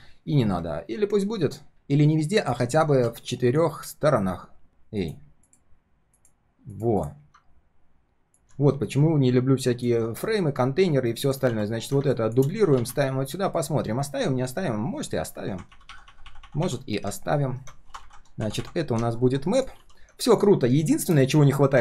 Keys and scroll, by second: 11.4 ctrl+d, 19.7 ctrl+s.